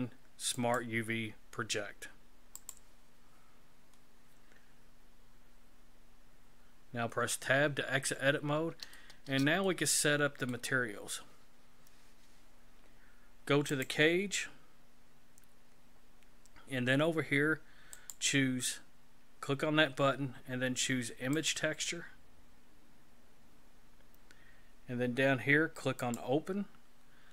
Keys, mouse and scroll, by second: 7.2 Tab, 8.1-8.8 scroll down 4, 9.0 shift+middle click, 9.6 middle click, 13.7 click, 18.0 click, 26.0 click.